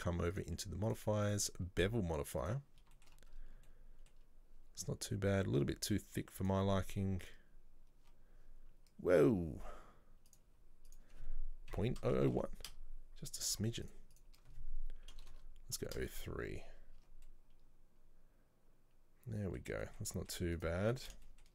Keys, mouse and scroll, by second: 0.4 click, 1.0 click, 1.4-3.0 drag, 3.0 shift+middle click, 3.3-3.8 scroll up 4, 3.8-6.0 shift+middle drag, 6.0-8.0 drag, 10.4 click, 11.0-12.2 drag, 12.2 KP_0, 13.9-15.4 drag, 15.4 BackSpace, 16.8 scroll down 1, 17.1 Tab, 17.3-20.6 middle drag, 20.6 right click, 20.9 Tab, 21.2-21.5 shift+scroll up 3, 21.3 shift+middle click.